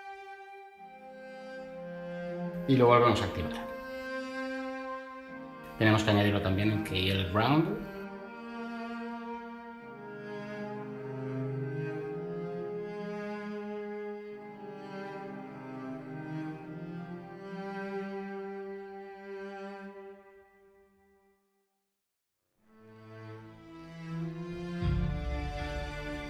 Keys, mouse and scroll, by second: 14.5 ctrl+v, 15.4 n.